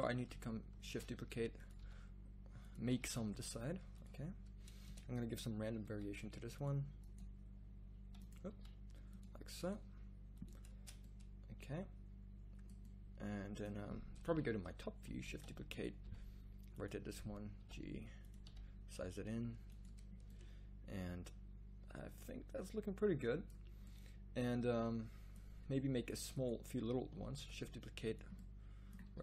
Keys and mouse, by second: 0.8 shift+d, 1.8 r, 2.9 g, 4.9 Tab, 5.8 g, 7.2 g, 8.5 g, 9.8 g, 10.7 Tab, 14.2 KP_7, 15.2 shift+d, 16.0 r, 17.6 g, 18.4 s, 27.3 shift+d, 29.0 r.